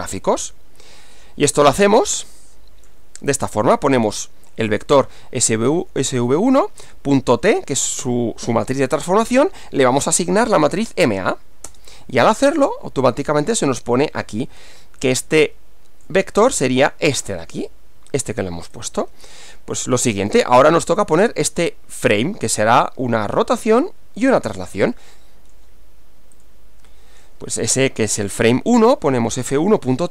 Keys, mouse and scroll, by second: 4.0-5.3 typing, 6.9 ., 7.4 shift+t, 8.2 space, 9.4 shift+0, 9.9 shift+space, 10.5 shift+m, 10.8 shift+a, 11.7 Return, 15.1-16.3 drag, 18.8-20.0 drag, 20.2 click, 25.2 click, 26.4 click, 28.0 f, 28.4 1, 29.5-30.1 typing.